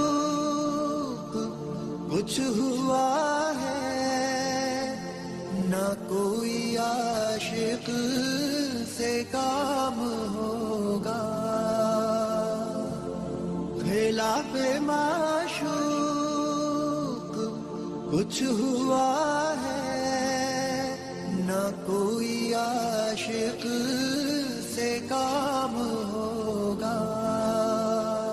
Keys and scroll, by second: 4.3 Escape, 5.7 alt+c, 5.7 alt+w, 6.2 p, 24.5 Delete.